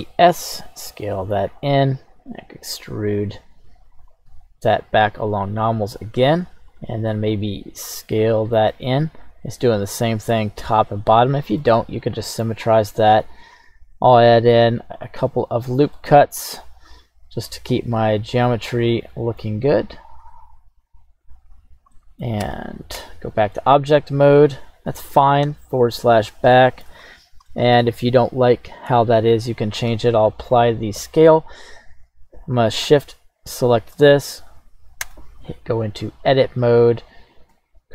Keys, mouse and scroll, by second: 0.0 e, 0.0 s, 1.6 click, 2.2 e, 4.0 right click, 4.3 q, 6.7 click, 7.5 s, 8.4 click, 8.7-10.4 middle drag, 11.6 middle click, 13.5 ctrl+r, 15.0 click, 15.9 middle click, 16.8 ctrl+r, 18.5 click, 18.9 middle click, 20.2 ctrl+r, 21.5 click, 21.9 middle click, 22.4 Tab, 22.9 Tab, 23.5-25.0 middle drag, 25.4 /, 26.5-26.9 shift+middle drag, 27.1-27.5 scroll up 2, 27.5-27.8 shift+middle drag, 28.3-29.5 scroll up 1, 29.9 ctrl+a, 31.6-32.8 scroll down 1, 33.4 shift+right click, 35.0 Tab.